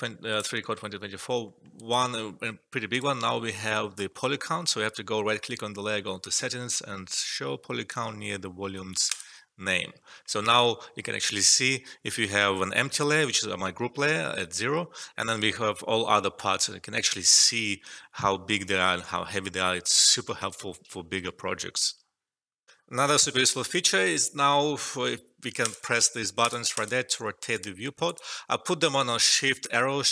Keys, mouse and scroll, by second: 0.5 alt+middle click, 1.4 alt+middle click, 1.7 alt+right click, 9.1 click, 10.1 alt+middle click, 22.6 alt+F12, 25.6 click, 28.8 alt+middle click, 29.8 shift+Left.